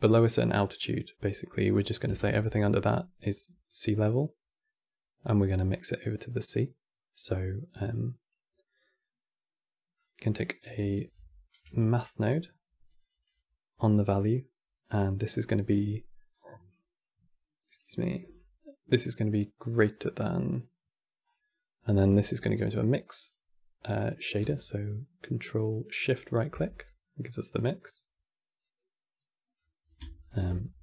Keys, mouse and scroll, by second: 1.9 shift+a, 4.1-4.7 right drag, 10.6 click, 10.8 click, 10.9 x, 11.3 q, 13.9 click, 16.0 click, 17.9-20.9 drag, 21.0 scroll up 2, 21.8 q, 24.2-26.5 ctrl+shift+right drag, 26.5-28.4 drag, 29.3 click, 29.9 ctrl+shift+click.